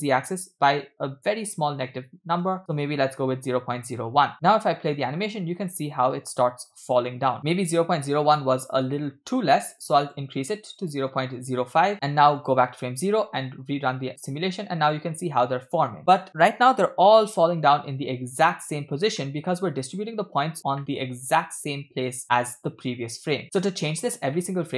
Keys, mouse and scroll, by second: 4.5 space, 9.8-11.9 drag, 12.4 click, 13.0 space, 14.6 space, 14.6-15.1 scroll down 3, 15.1-17.1 middle drag, 17.7-18.1 scroll up 3, 19.2 middle click, 19.9 click, 20.8 middle click, 23.6 middle click, 24.3 middle click.